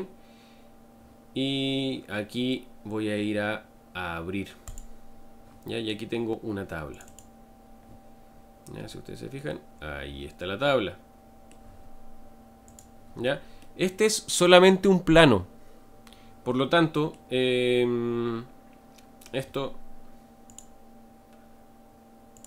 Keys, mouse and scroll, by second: 8.3-9.5 scroll down 5, 9.5-12.7 middle drag, 12.7 click, 13.6-16.9 middle drag, 18.1-19.3 scroll up 3.